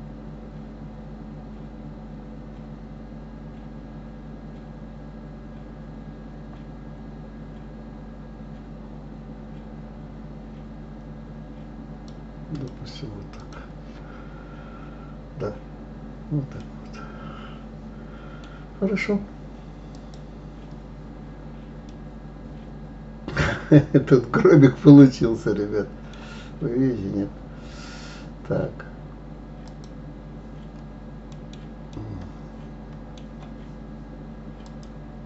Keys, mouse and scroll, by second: 12.5 click, 16.6-19.6 middle drag, 19.9 click, 21.1 scroll down 2, 21.8-24.9 middle drag, 26.7 scroll up 2, 29.6 click, 31.3 scroll up 1, 31.3-34.6 middle drag, 34.6 click.